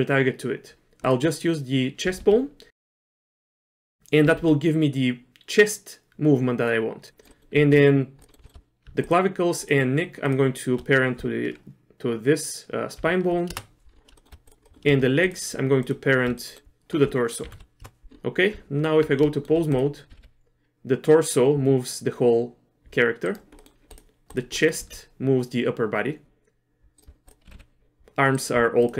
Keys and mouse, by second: 2.1 r, 3.6 middle click, 4.2 r, 7.3 middle click, 7.6 Tab, 8.3 middle click, 8.4 shift+middle click, 10.3 shift+click, 13.0 ctrl+p, 14.2 shift+middle click, 14.6 middle click, 15.3 shift+click, 16.4 middle click, 17.5 ctrl+p, 18.5 Tab, 19.4 shift+middle click, 19.8 click, 20.1 r, 23.6 middle click, 23.9 click, 24.3 click, 24.5 middle click, 24.8 r, 27.3 click, 27.5 r.